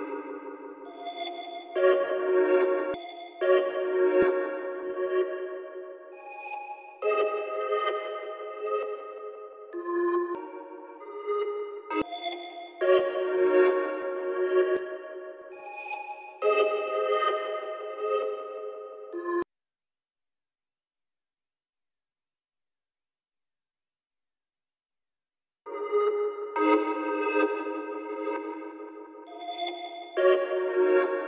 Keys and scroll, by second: 2.9 typing.